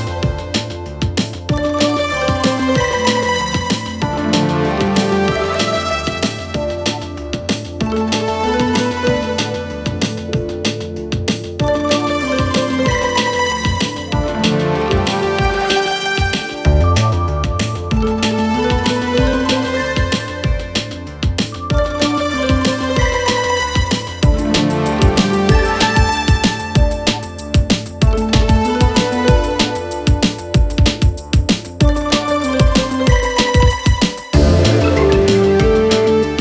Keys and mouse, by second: 3.7-4.0 middle drag, 4.1 shift+middle drag, 4.8 middle click, 27.6-28.6 middle drag, 29.2 s, 29.9 g, 33.2 g, 34.3 click.